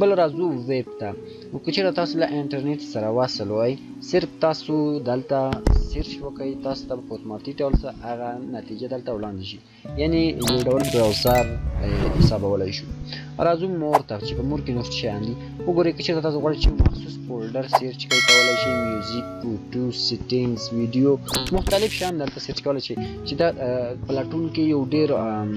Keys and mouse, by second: 13.8 shift+click.